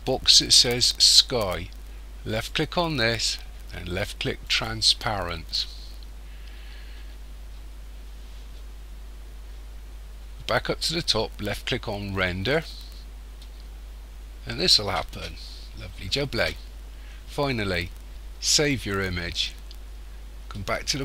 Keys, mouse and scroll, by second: 2.4-5.6 drag, 12.3 click.